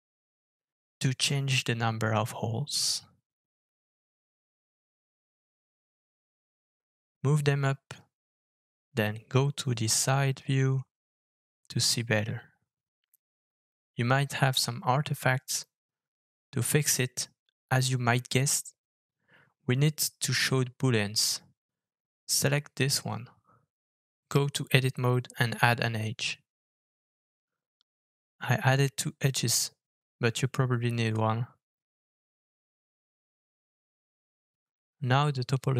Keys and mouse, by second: 3.4 g, 7.8 KP_3, 8.6 KP_1, 10.0 g, 20.6 click, 21.5 Tab, 23.6 ctrl+r, 27.7 ctrl+r, 29.8 Tab, 31.3 alt+f, 33.5 Tab, 34.9 shift+click.